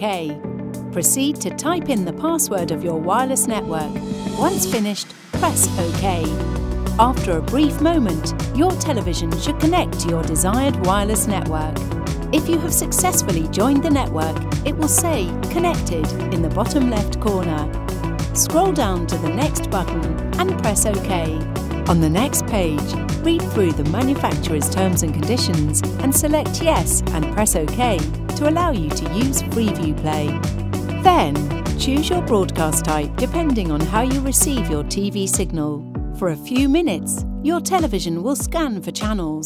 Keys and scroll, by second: 13.0 Down, 13.7 Down, 14.2 Down, 14.6 Down, 15.0 Down, 18.8 Return, 28.2 Return, 32.6 Return.